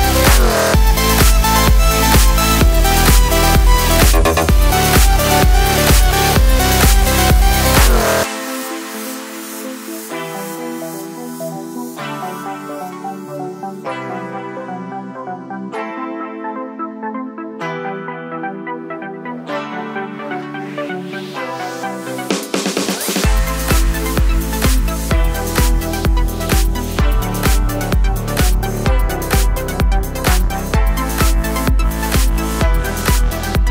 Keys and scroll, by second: 10.6 Home, 11.1 space, 11.3 space, 17.8 space, 23.8 ctrl+space, 24.3 1.